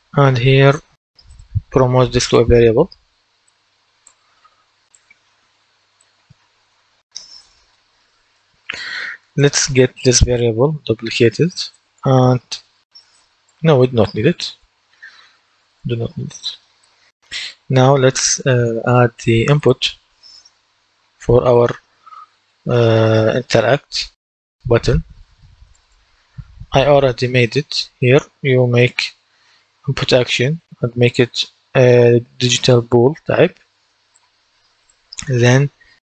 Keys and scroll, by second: 11.4 ctrl+d, 14.3 Delete.